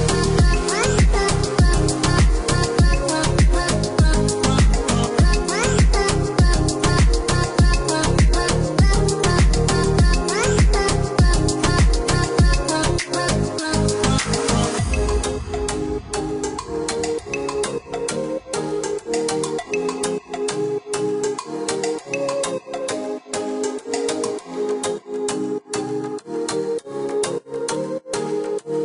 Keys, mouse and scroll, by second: 1.2 click, 4.1 click, 5.8 `, 6.2 Escape, 8.0 click, 9.4 click, 11.0 Escape, 12.4 ctrl+click, 13.0 ctrl+click, 14.3 click, 15.0 click, 16.9 ctrl+click, 17.7 ctrl+click, 20.8 Escape, 22.7 click, 23.4 click, 24.2 scroll down 1, 24.8 click, 26.1 click, 27.4 click.